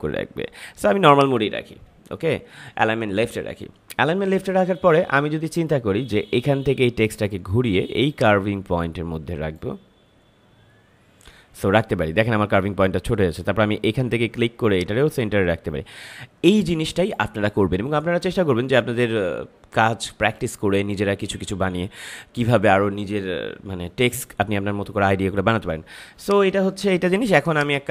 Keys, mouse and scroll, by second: 8.0-14.6 drag, 14.6-24.3 drag, 26.2-27.9 drag.